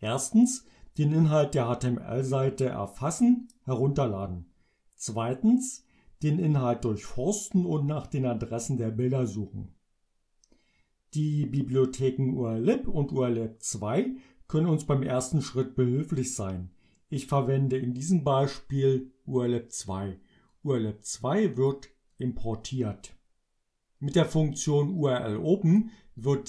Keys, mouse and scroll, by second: 20.6-21.9 drag, 22.2 click, 24.7-26.0 drag.